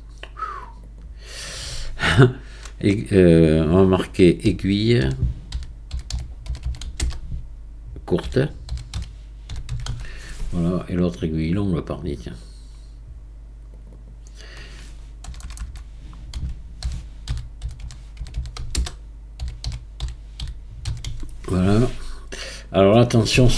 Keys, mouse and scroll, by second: 0.6 click, 0.9-3.8 drag, 6.6 l, 12.3 click, 13.7 click, 15.4 BackSpace, 15.6 BackSpace, 18.3 l.